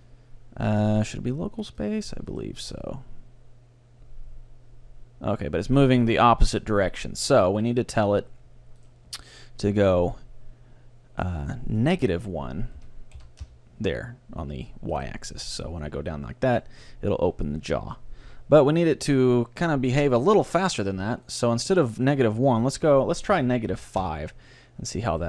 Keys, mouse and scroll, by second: 2.4-4.1 right drag, 2.7 g, 7.3-10.5 right drag, 9.7-11.5 middle drag, 11.8-13.6 drag, 15.0-16.9 right drag, 15.5 g, 21.1-22.4 right drag, 22.4 middle click, 23.1-24.3 drag, 25.1-25.2 right drag.